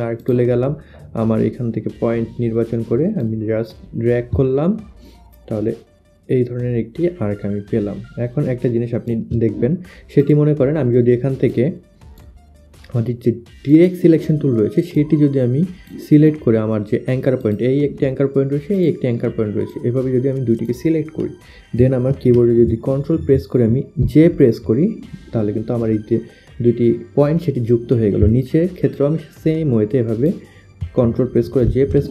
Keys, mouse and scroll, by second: 0.2 click, 3.2 click, 4.4 shift+click, 10.3 click, 11.5 click, 13.7 click, 14.2 click, 15.0 click, 17.5 click, 18.8 click, 19.7 click, 22.2 click, 24.1 ctrl+j, 29.0 click, 31.7 ctrl+j.